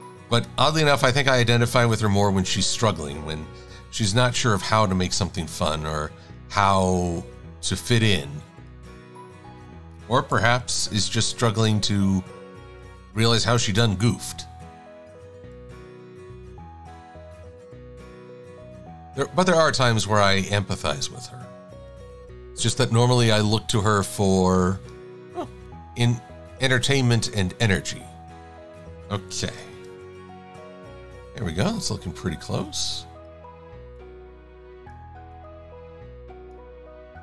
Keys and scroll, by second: 4.1 super+=, 10.6 Delete, 29.8 shift+x.